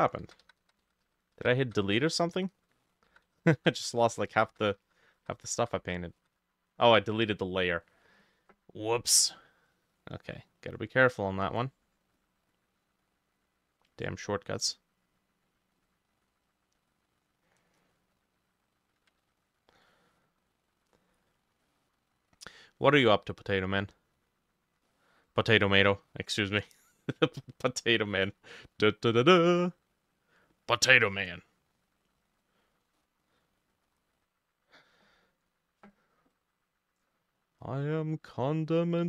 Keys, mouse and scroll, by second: 0.3 ctrl+z, 0.5 ctrl+z, 0.7 ctrl+z, 0.9 ctrl+z, 1.1 ctrl+z, 1.4 ctrl+z, 1.7 ctrl+z, 2.3-2.8 scroll down 1, 3.0-4.7 ctrl+middle drag, 3.1 ctrl+z, 3.3 ctrl+z, 3.5 ctrl+z, 3.6 ctrl+z, 3.8 ctrl+z, 4.0 ctrl+z, 4.2 ctrl+z, 4.4 ctrl+z, 4.7 ctrl+z, 4.9 ctrl+z, 5.0 ctrl+z, 5.2 ctrl+z, 5.4 ctrl+z, 5.6 ctrl+z, 5.8 ctrl+z, 6.2 ctrl+z, 7.5-7.9 scroll up 2, 7.9 middle click, 8.0-9.6 scroll down 1, 9.6 double click, 9.7 double click, 10.0 double click, 12.6 double click, 13.4 double click, 16.3 double click, 17.8 middle click, 19.3 ctrl+z, 20.0 middle click, 21.7 middle click, 24.9 middle click, 26.0 middle click, 32.5 double click, 33.0 middle click, 34.0 double click.